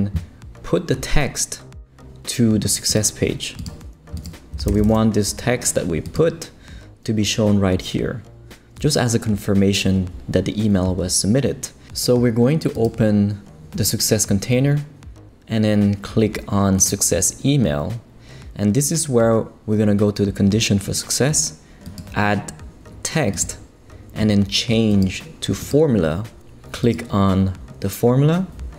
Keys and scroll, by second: 4.3-5.4 typing.